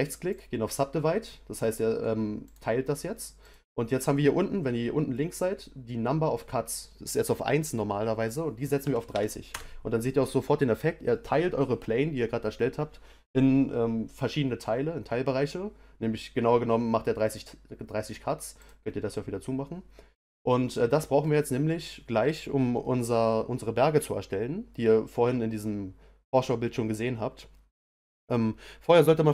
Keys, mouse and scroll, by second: 2.4-6.4 drag, 18.6 click, 20.3-21.7 middle drag, 21.7 scroll down 1.